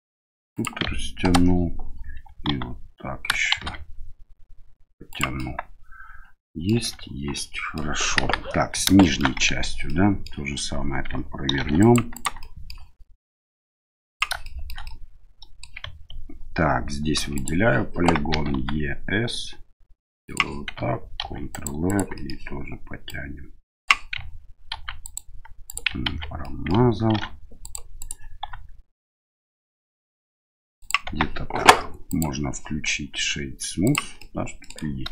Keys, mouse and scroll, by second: 2.4 s, 5.3-6.7 middle drag, 6.7 Tab, 7.3 middle click, 8.2 KP_1, 9.0 shift+middle drag, 9.4 Tab, 9.8 middle click, 11.5 ctrl+r, 12.5 middle click, 13.5 click, 14.4 shift+middle click, 14.8 middle click, 17.2 3, 17.3 right click, 18.3 e, 21.2 ctrl+r, 22.2 middle click, 23.1 click, 24.7 ctrl+r, 26.0 ctrl+z, 26.4 middle click, 27.1 ctrl+r, 28.4 s, 31.0 Tab, 32.1-34.0 drag, 34.2-34.7 middle drag.